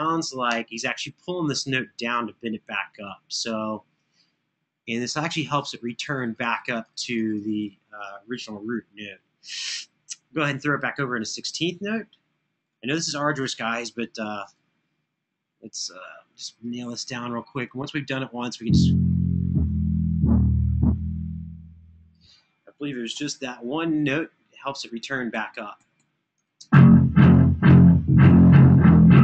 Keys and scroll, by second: 17.1 Escape, 22.9 super+[, 24.3 Escape, 24.8 Escape, 25.3 Escape.